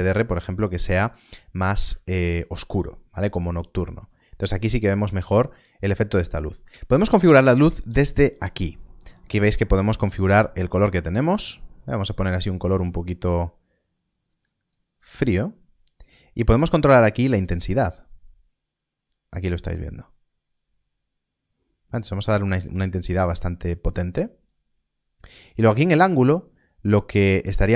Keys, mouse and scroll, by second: 1.2 click, 1.3 middle click, 2.0 shift+middle click, 4.8 click, 8.6 click, 17.4 click.